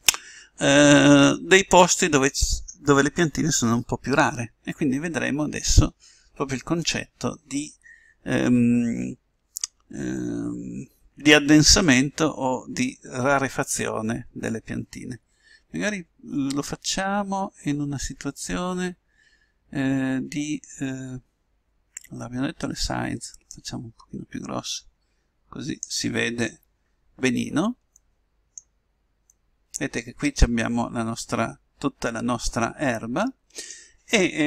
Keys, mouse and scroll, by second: 23.7-25.2 drag, 28.1-30.0 middle drag, 30.9 middle click.